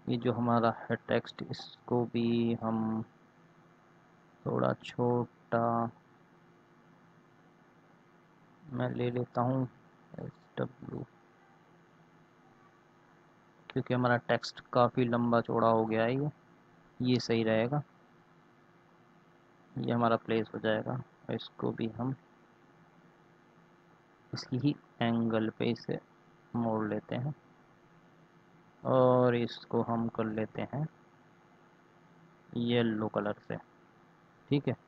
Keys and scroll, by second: 9.9 s, 10.1 w.